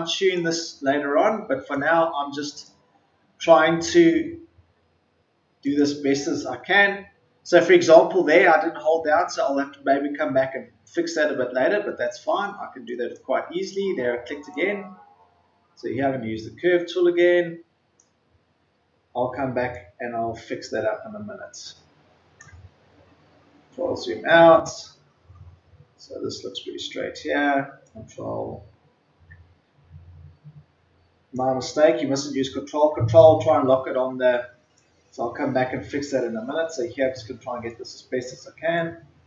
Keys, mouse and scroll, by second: 3.7-4.3 ctrl+scroll up 1, 5.5 click, 12.8 click, 14.4-17.9 ctrl+drag, 19.7-22.3 ctrl+drag, 22.9-23.2 scroll down 1, 27.7-31.7 ctrl+drag, 31.7-32.0 scroll down 1, 32.3-33.1 ctrl+scroll down 1, 33.1 ctrl+scroll up 1, 34.9-39.2 drag.